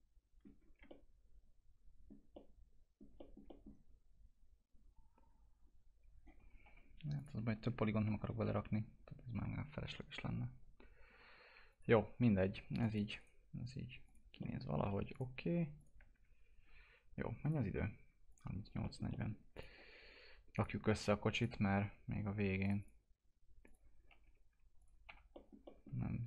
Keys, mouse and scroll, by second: 0.6 scroll down 1, 0.9-2.3 alt+middle drag, 2.3 alt+middle click, 3.2 middle click, 6.7 F4, 7.2 click, 7.6 F4, 7.8-8.5 scroll up 2, 8.1 F4, 10.8 scroll down 1, 11.7 click, 11.9 F4, 12.1-12.5 scroll down 1, 12.8 click, 13.2 right click, 14.1 click, 14.4 middle click, 15.1 ctrl+click, 16.2 alt+q, 17.5 click, 18.8 middle click, 19.5 click, 24.0 scroll up 1, 24.2 F4, 24.8 click, 25.1 F4, 25.3 middle click.